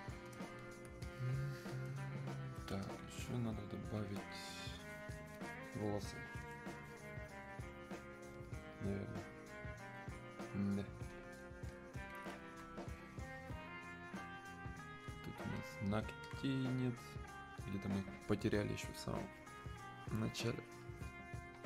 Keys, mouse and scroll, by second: 1.1 alt+click, 1.7-6.1 drag, 11.3 alt+click, 11.7-15.6 alt+drag, 15.6 click, 16.4-20.8 alt+drag.